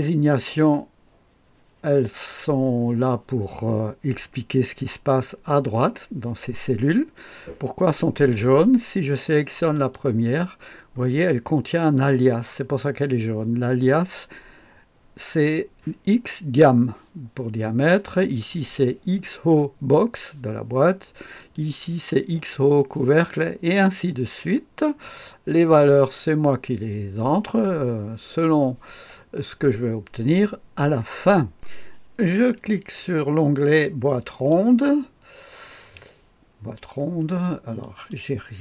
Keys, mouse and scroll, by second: 9.7 click, 18.1 click, 21.5 click, 22.0 click, 31.5 click, 34.3 click, 37.8 click.